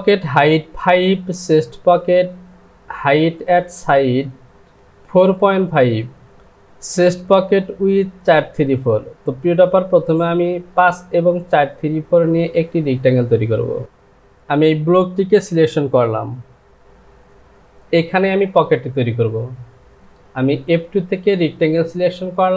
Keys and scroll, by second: 16.9 Home.